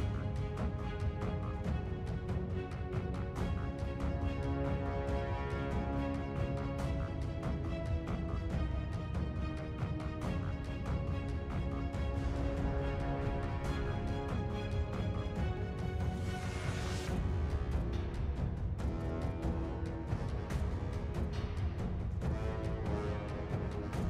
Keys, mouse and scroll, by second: 2.4 scroll up 2, 3.8-4.3 scroll down 2, 5.1 scroll up 2, 6.3-6.8 scroll down 3, 7.4-8.3 scroll up 2, 8.3-9.4 scroll down 3, 15.8 scroll up 2, 17.3-18.2 scroll down 2, 18.2 scroll up 3, 19.3 scroll down 2, 20.9-21.9 scroll up 2, 21.9-23.3 scroll down 3, 23.8 scroll up 2.